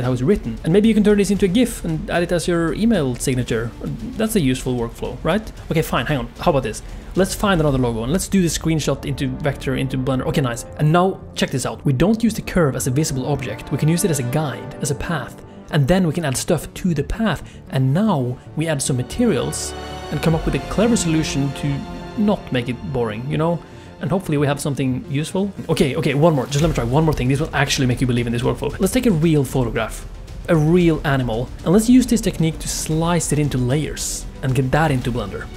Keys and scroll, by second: 3.3 space.